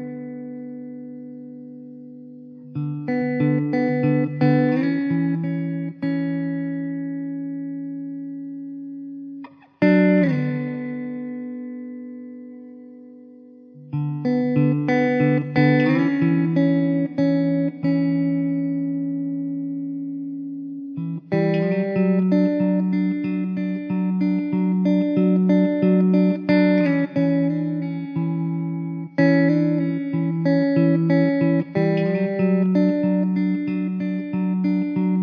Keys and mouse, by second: 7.2 m, 12.6 alt+middle click.